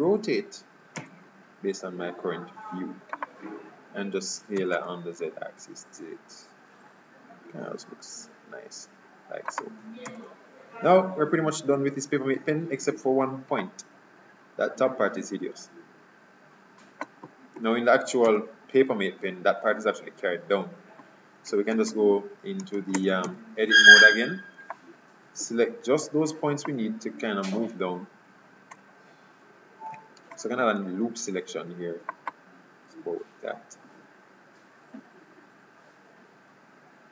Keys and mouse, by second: 1.0 r, 4.7 s, 10.2 Tab, 17.7 KP_3, 18.3 z, 21.9 ctrl+Tab, 22.9 ctrl+Tab, 30.3 ctrl+r.